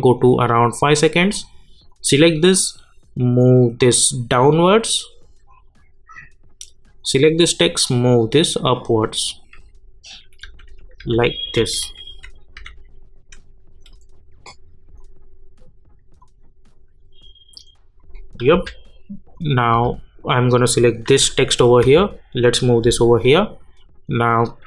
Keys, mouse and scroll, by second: 10.4 Down, 15.0-18.5 drag, 18.5 j, 19.3 click, 19.7 j, 21.8 [.